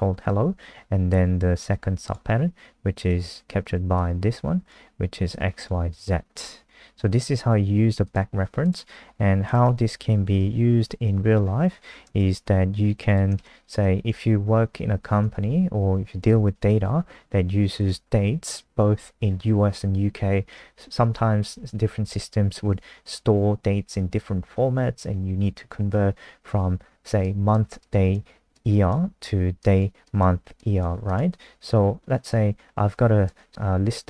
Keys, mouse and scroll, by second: 10.2 Left, 10.4 Up, 10.7 Home, 11.3-13.1 scroll down 4, 13.1 shift+click, 13.4 ctrl+c, 13.6 click, 14.2 shift+Home, 14.4 shift+Up, 14.6 shift+Up, 14.7 shift+Up, 14.9 shift+Up, 17.8 click.